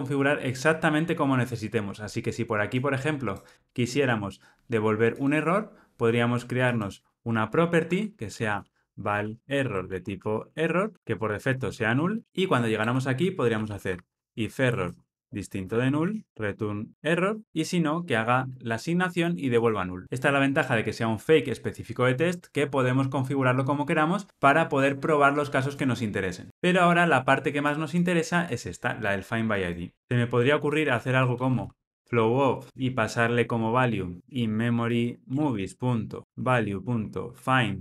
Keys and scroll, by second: 12.2 Escape, 14.7 Return, 32.8 Return.